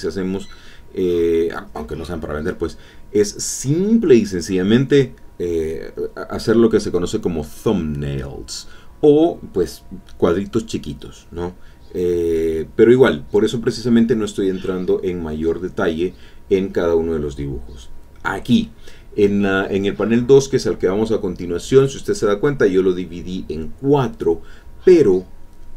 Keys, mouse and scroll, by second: 2.0 click, 4.3-8.4 drag, 11.4-14.3 drag, 20.4 alt+Tab, 21.6 alt+Tab, 23.2-24.5 drag, 25.5 click.